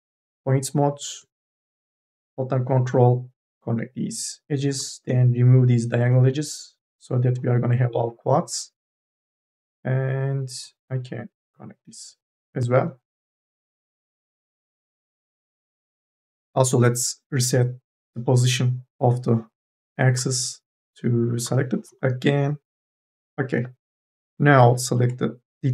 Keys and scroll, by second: 13.3 e, 14.5 t, 23.4 3.